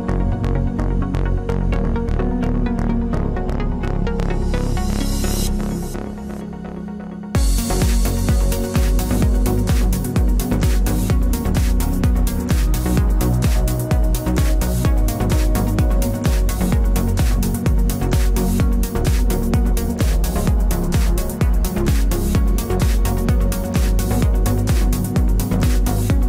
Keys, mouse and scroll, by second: 0.2 g, 1.1 g, 2.3 b, 2.9 g, 4.3-7.5 right drag, 4.6 g, 5.8 g, 8.0-10.8 right drag, 8.1 g, 9.4 g, 10.8 ctrl+r, 11.9 right click, 12.1 g, 13.6 ctrl+Tab, 14.4-16.2 right drag, 15.2 g, 16.2 ctrl+Tab, 17.3 c, 21.4-23.1 right drag, 22.1 i, 22.8 z, 23.1 middle click, 24.1-25.4 drag, 24.9 KP_Decimal, 25.2 KP_3.